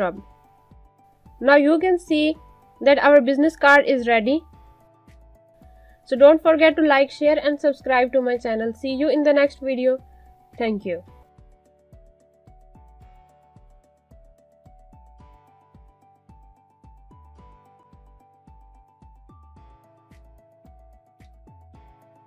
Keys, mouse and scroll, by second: 0.0-1.0 typing, 1.0 click, 2.9-3.4 alt+scroll down 2, 3.5 space, 5.0 click, 5.5 space, 10.5 space, 10.6 click, 11.2 space.